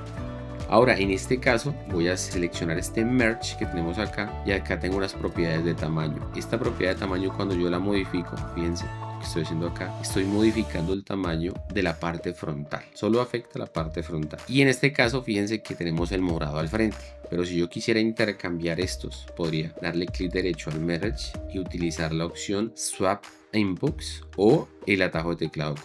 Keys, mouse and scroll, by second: 4.3 click, 19.2 click.